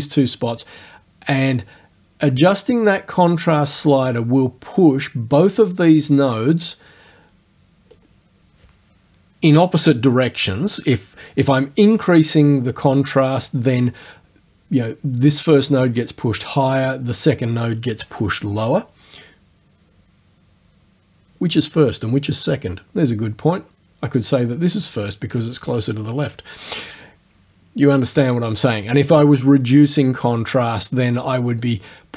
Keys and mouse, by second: 6.5-8.1 drag, 31.7-32.1 drag.